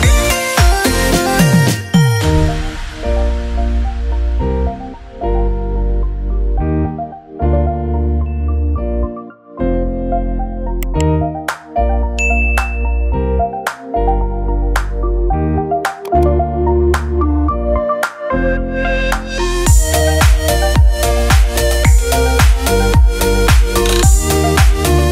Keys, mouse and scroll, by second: 6.4 click, 9.0 click, 10.0 ctrl+j, 12.1-14.9 drag, 17.6 click.